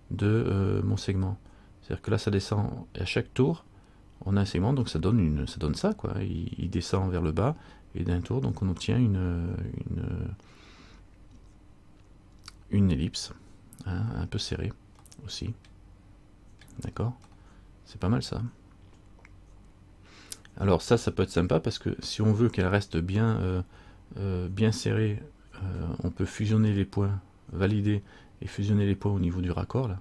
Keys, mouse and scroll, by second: 5.1 middle click, 15.8 middle click, 17.4 middle click, 21.4 middle click, 25.4-26.0 scroll up 3.